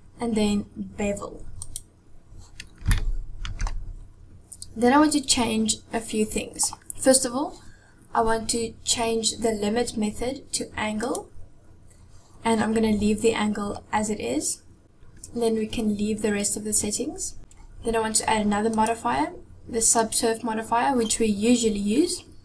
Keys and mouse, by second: 2.9-3.6 shift+middle drag, 11.0 click, 18.7-20.3 drag.